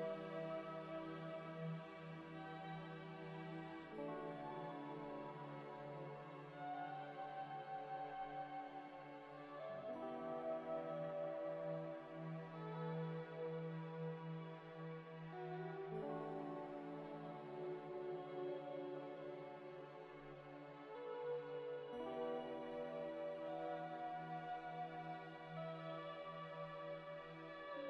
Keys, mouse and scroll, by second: 0.5 middle click, 0.5 scroll up 1, 1.0 F3, 1.3-3.7 typing, 2.5 double click, 2.7 F3, 4.0 Escape, 4.5 Delete, 4.9 alt+Tab, 8.2 double click, 9.3 alt+Tab, 9.7 ctrl+v, 10.0 scroll down 1, 10.4 ctrl+z, 10.7 alt+Tab, 11.3 alt+Tab, 12.6 F3, 12.8-13.8 typing, 17.0 scroll up 1, 20.4 middle click, 20.4 middle click, 21.2 F3, 21.6 b, 21.7 u, 21.8 m, 21.9 Return, 25.1 0, 25.2 ., 25.3 1, 25.4 Return, 26.9 0, 26.9 ., 27.1 2, 27.3 Return.